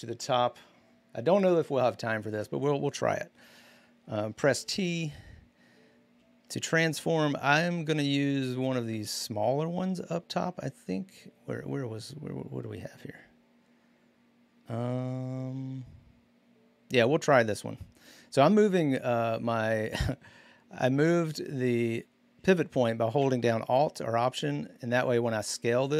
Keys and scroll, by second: 4.4 ctrl+t.